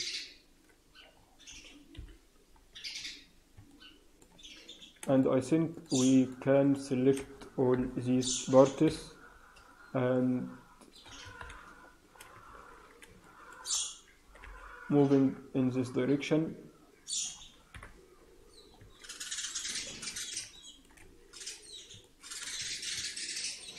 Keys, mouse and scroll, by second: 0.1 shift+z, 0.7-1.1 scroll down 2, 1.1-1.9 scroll up 3, 1.9 scroll up 1, 1.9 KP_3, 2.5 scroll up 2, 2.8 scroll down 2, 3.6 middle click, 4.3 Tab, 6.0 shift+click, 6.3 shift+click, 6.5 shift+click, 7.7 ctrl+l, 8.8 KP_3, 9.5-9.9 scroll up 2, 10.1 middle click, 11.3 ctrl+KP_7, 12.1-12.6 scroll down 6, 13.3 shift+middle click, 13.6-14.1 scroll up 3, 14.1 g, 17.7 KP_1, 18.3-18.7 scroll down 3, 18.6 scroll up 5, 18.7 Tab, 19.6-20.1 scroll down 2, 20.1 scroll up 1, 20.5 shift+middle click, 20.9-21.5 scroll up 3, 21.9 shift+middle click, 22.5 Tab, 22.5 scroll down 3, 22.8 scroll up 4, 22.9 Tab.